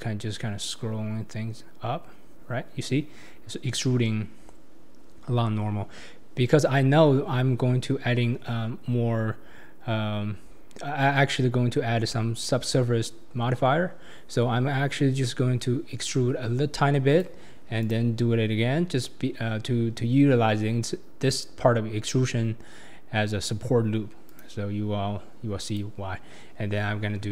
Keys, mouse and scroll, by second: 17.8-27.3 right drag.